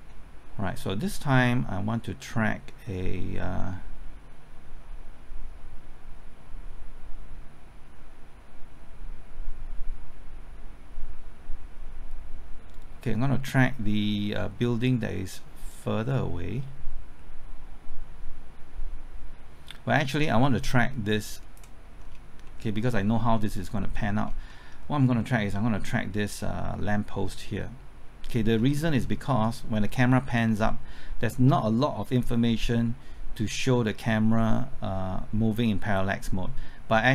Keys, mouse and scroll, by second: 3.0-21.7 drag, 22.0-22.5 scroll up 1, 22.5 middle click, 22.8-23.7 scroll up 1, 23.7 middle click, 24.1-24.5 scroll up 1, 24.5 middle click, 24.9-28.5 scroll up 1, 28.5 scroll down 1, 29.3 middle click, 30.4-37.1 drag.